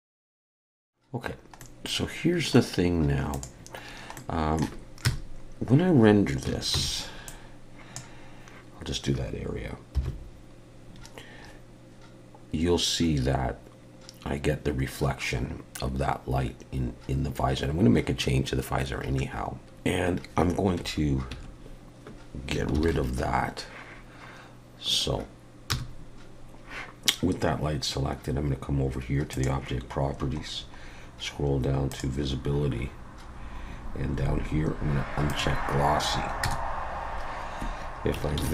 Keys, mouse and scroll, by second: 0.0-0.4 scroll down 5, 0.1 shift+middle click, 0.3 shift+middle click, 0.4 middle click, 0.6 shift+middle click, 0.7 middle click, 1.4 scroll down 1, 1.6 middle click, 3.3 click, 3.9-4.2 scroll down 1, 4.2 middle click, 5.1 KP_0, 6.7 ctrl+b, 10.2 F12, 22.8 ctrl+alt+b, 25.7 KP_0, 29.3 click, 30.1-31.9 scroll down 10, 31.9 click, 32.3-33.3 scroll down 2, 33.3-33.7 scroll down 2, 35.3 click, 36.4 KP_0, 38.4 ctrl+b.